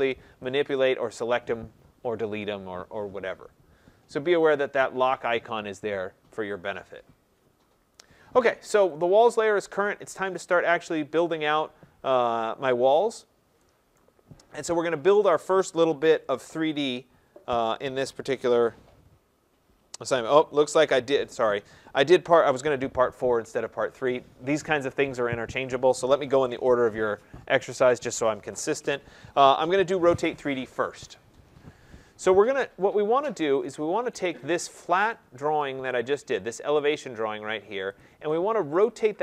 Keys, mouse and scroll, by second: 0.7 click, 1.2 click, 4.5 click, 9.0 click, 13.0 middle click, 13.2 middle click, 13.9 right click, 14.8 middle click, 15.0 middle click, 16.1 middle click, 17.0 middle click, 21.2 scroll, 22.1 scroll, 31.9-32.6 scroll down 3, 32.6 scroll down 1, 34.1 right click, 34.6 scroll, 35.9 right click, 36.9 click, 38.0 click, 38.7 right click.